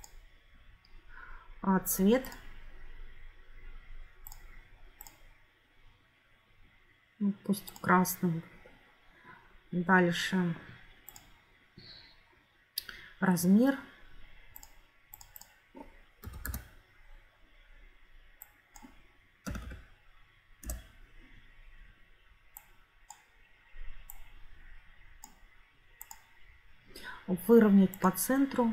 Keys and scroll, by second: 15.9-16.9 typing, 19.1-20.1 typing, 20.6 Return.